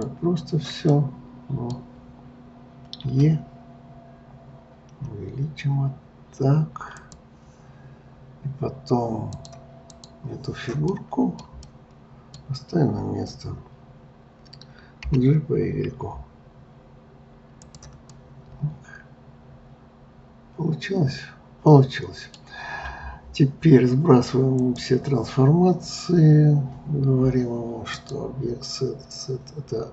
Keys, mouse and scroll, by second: 0.9-3.0 middle drag, 3.0 e, 9.3-10.9 drag, 10.9-14.7 middle drag, 15.0 g, 18.1-21.1 middle drag, 24.5-27.6 drag, 27.9-29.9 drag.